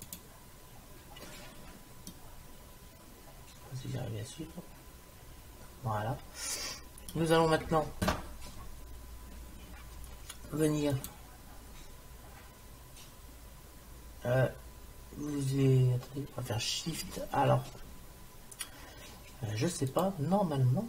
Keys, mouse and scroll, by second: 2.1 middle click, 2.9-4.0 middle drag, 11.0-12.7 drag.